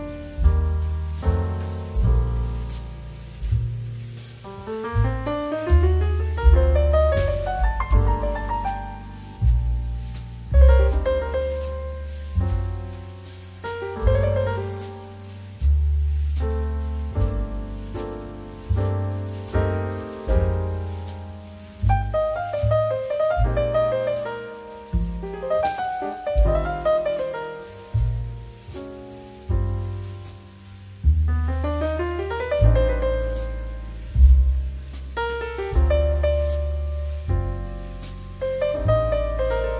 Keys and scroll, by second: 2.8 space, 5.3 space, 7.6 KP_0, 7.7 Return, 7.9 space, 9.2 2, 15.0 space, 21.6 space, 28.4 space, 31.3 space, 39.5 space.